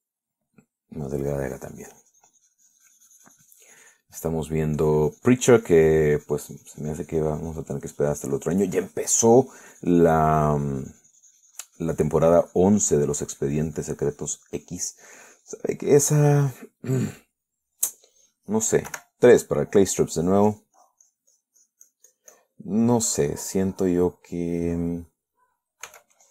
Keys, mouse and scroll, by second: 1.2-2.3 middle drag, 2.4-5.4 drag, 5.4 middle click, 6.0-9.0 drag, 9.2-16.1 drag, 16.1 middle click, 17.9 middle click, 20.1 3, 20.4 middle click, 21.4-23.8 drag, 24.0-26.3 middle drag.